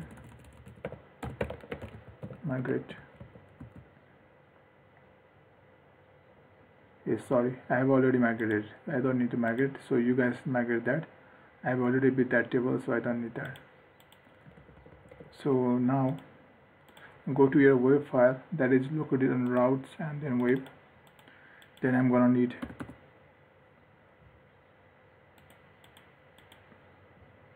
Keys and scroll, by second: 14.7 ctrl+s.